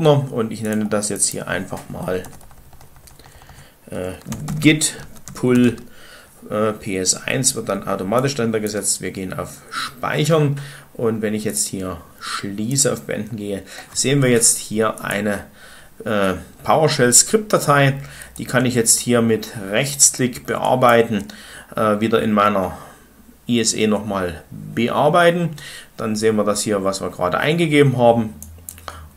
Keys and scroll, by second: 1.8-5.6 typing.